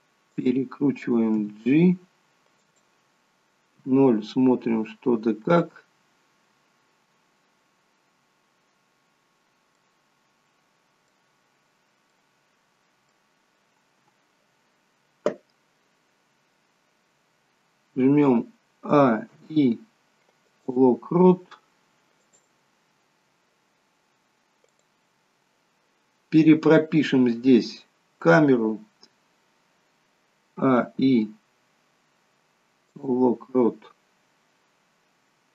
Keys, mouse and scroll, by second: 1.4 g, 3.9 KP_0, 7.6-9.7 scroll down 4, 9.7 middle click, 11.9 scroll down 2, 12.1 middle click, 18.8 a, 19.3 i, 22.2 click, 24.7 click, 30.5 a, 30.7 i.